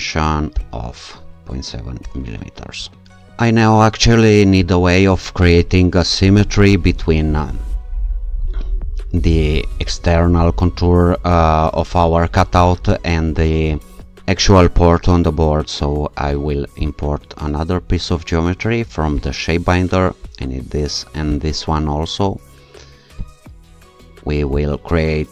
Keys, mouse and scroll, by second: 0.7 shift+v, 2.0 Return, 16.8 click, 19.2 click, 21.3 click, 23.5 right click, 24.6 click.